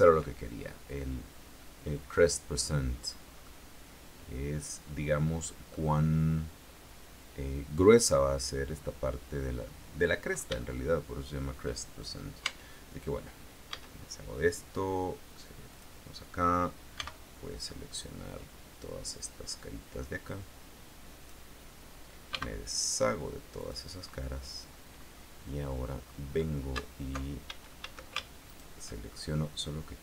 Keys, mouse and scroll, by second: 3.6-6.1 middle drag, 6.5-6.8 scroll up 2, 10.2 scroll down 2, 10.7-11.8 shift+middle drag, 12.6 Tab, 13.9 a, 15.9 click, 17.1 b, 17.7-21.6 drag, 22.5 x, 23.7 click, 25.1-25.9 scroll up 2, 26.3 scroll up 2, 27.7 alt+shift+a, 28.7 alt+shift+right click.